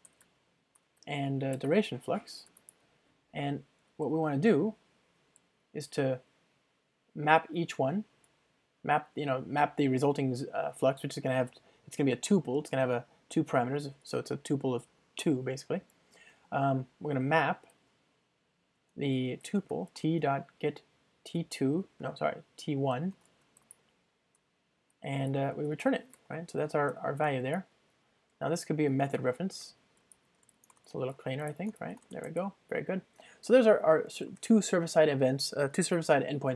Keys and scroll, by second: 3.8 Return, 8.3 Return, 21.5 Return, 22.0 Return, 22.1 alt+BackSpace, 26.9 Return, 29.2 alt+Return, 30.8 ctrl+alt+shift+Right, 31.8 ctrl+alt+shift+Left, 34.3 alt+super+l.